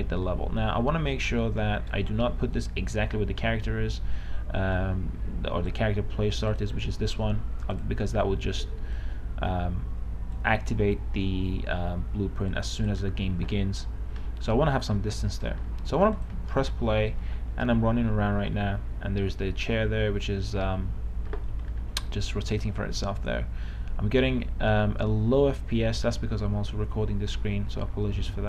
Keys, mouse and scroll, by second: 0.0 right click, 0.6 w, 0.8 w, 3.5-16.1 drag, 17.2-18.7 typing, 20.0-20.7 w, 20.9 w, 23.0 w, 24.6-25.5 d.